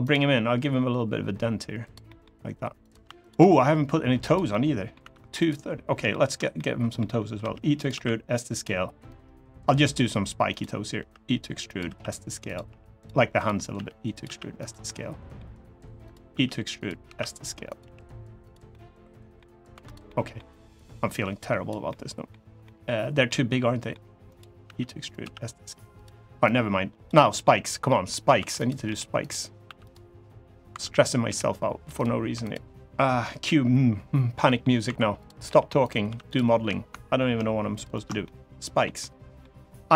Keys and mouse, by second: 1.6 click, 1.8 middle click, 2.9 shift+click, 3.8 g, 4.0 click, 4.2 middle click, 4.7 3, 5.8 shift+middle click, 6.3 middle click, 7.1 e, 7.5 click, 7.7 s, 8.3 click, 8.8-9.8 drag, 11.4 click, 11.4 e, 11.6 s, 12.2 click, 12.4 g, 12.7 click, 13.2 click, 13.5 e, 13.8 click, 14.0 s, 14.3 click, 14.6 middle click, 16.0 e, 16.5 click, 16.8 s, 17.4 click, 17.5 g, 18.2 click, 18.4 middle click, 19.4 3, 19.8 middle click, 20.5 click, 21.6 middle click, 22.4 middle click, 23.0 middle click, 24.0 click, 24.8 e, 24.8 click, 24.9 s, 25.7 click, 26.2 click, 26.9 middle click, 27.6 middle click, 28.3 click, 28.3 1, 28.6 g, 28.9 click, 29.4 3, 30.4 1, 30.7 click, 31.0 g, 31.7 click, 32.1 3, 32.1 click, 34.2 middle click, 34.6 1, 34.9 click, 35.2 g, 35.6 click, 35.8 3, 36.0 click, 37.5 ctrl+shift+click, 38.0 middle click, 38.7 middle click, 39.8 i.